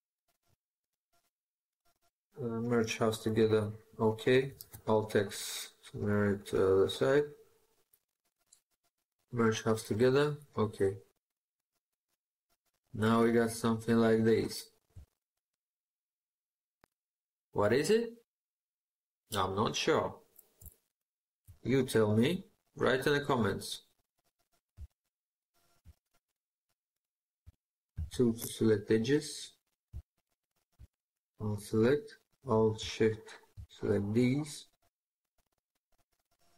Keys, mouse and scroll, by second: 4.4 alt+x, 10.9 middle click, 14.9 shift+middle click, 20.5 shift+middle click, 23.6-24.6 scroll up 1, 25.0 scroll, 27.8 2, 29.9 alt+click, 32.8 alt+shift+click.